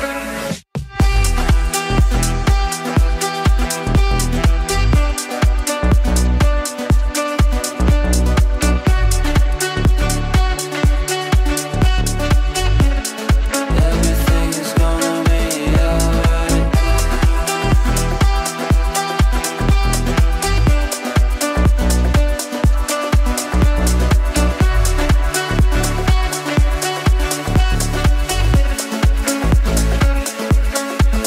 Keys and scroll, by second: 0.6 Delete, 21.2 Delete.